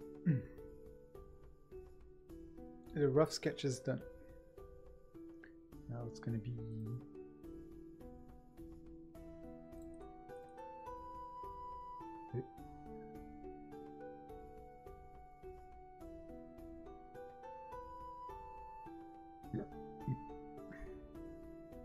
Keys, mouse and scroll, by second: 17.8 ctrl+z.